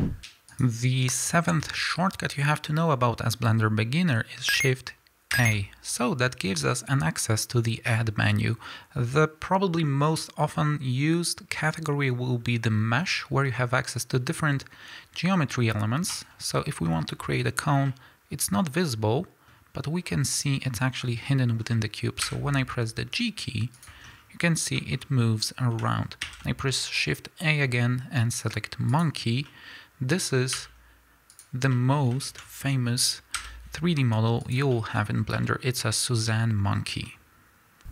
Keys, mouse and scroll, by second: 0.4 click, 1.9-3.4 scroll down 1, 3.4-3.7 scroll up 1, 3.7-4.6 scroll down 1, 5.3 shift+a, 16.5-16.8 scroll down 1, 16.8-17.7 scroll up 1, 17.7-23.8 middle drag, 20.0 scroll up 1, 21.5 scroll down 1, 22.1 g, 23.8 click, 24.0 scroll down 1, 24.7-31.3 middle drag, 25.3 scroll up 1, 26.1 shift+a, 30.5 s, 31.3 click, 31.6 scroll down 1, 31.6-34.4 middle drag, 33.2 g, 34.4 click, 34.7-37.9 shift+middle drag, 35.0 scroll up 2.